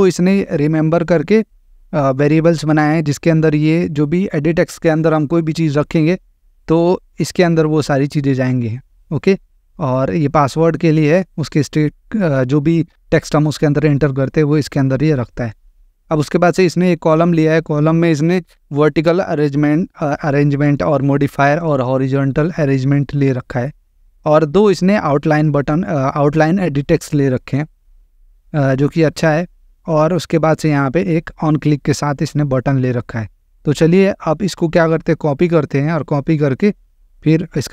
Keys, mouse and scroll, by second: 0.6 click, 2.8 click, 7.5 click, 9.5 click, 11.1 click, 14.8 click, 17.4 click, 18.6 click, 20.6 click, 23.8 click, 25.4 click, 27.9 click, 29.8 click, 32.2 click, 33.6 click, 35.3 click, 37.1 click.